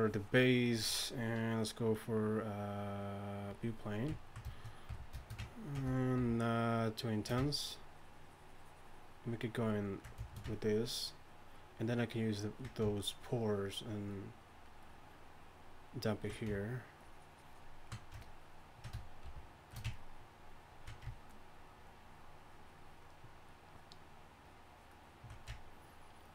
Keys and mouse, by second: 6.2 shift+f, 19.3 shift+f.